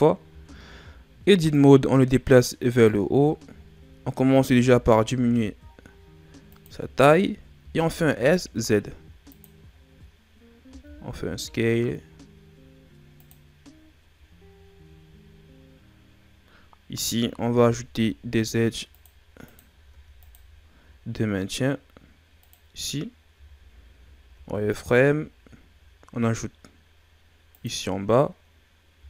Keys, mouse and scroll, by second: 0.2 Tab, 1.5 click, 3.1 scroll up 5, 4.3 s, 6.9 shift+scroll down 4, 7.5 s, 9.7 scroll down 2, 10.6 s, 13.8-14.6 scroll up 5, 16.5-17.0 scroll up 1, 17.6 ctrl+r, 19.8 ctrl+r, 23.3 z, 24.2 ctrl+r, 28.9 z.